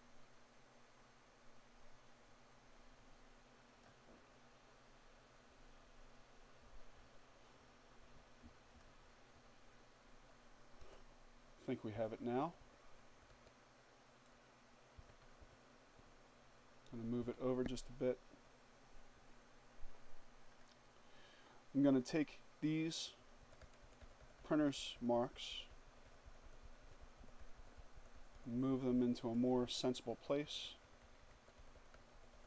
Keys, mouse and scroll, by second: 7.6 click, 9.6 Down, 10.8 Down, 13.8 Left, 15.9 Left, 19.2 click, 20.9 click, 22.2 Down, 28.3 Right, 30.0 Down, 31.2 Right.